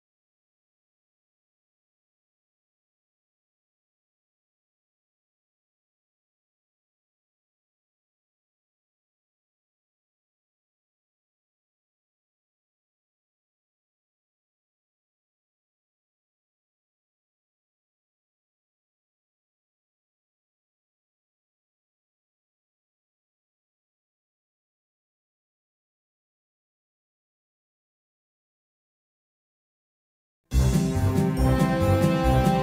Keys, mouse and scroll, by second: 0.8-3.6 middle drag, 4.2-6.4 drag, 15.5-19.0 drag, 22.0-23.6 middle drag, 24.2 middle click, 25.0-28.9 middle drag, 30.8-32.6 middle drag.